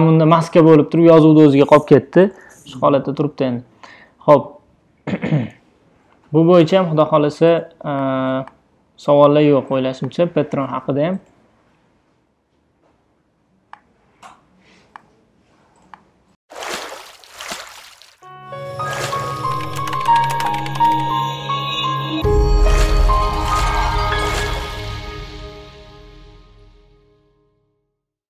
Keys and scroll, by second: 5.3 BackSpace, 5.6 ■.